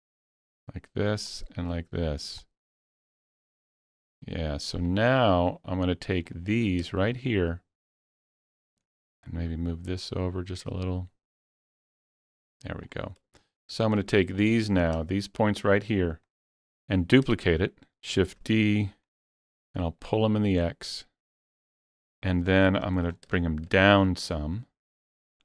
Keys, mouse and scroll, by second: 0.5-2.4 drag, 2.4-4.9 drag, 5.2 click, 6.7 scroll down 2, 7.0 shift+middle click, 8.2 click, 8.6 scroll up 1, 9.7-14.4 drag, 14.4 ctrl+click, 17.5 shift+middle click, 18.1 shift+d, 19.0 click, 20.3-22.0 drag, 22.5 scroll up 1, 22.8 shift+middle click, 23.1-23.5 scroll up 3.